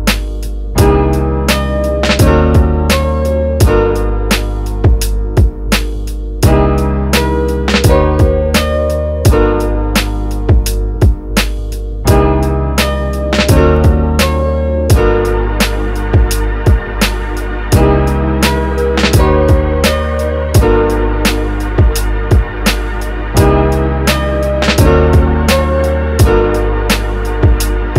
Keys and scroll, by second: 0.8 x, 14.8 x, 21.5 f, 22.8 f.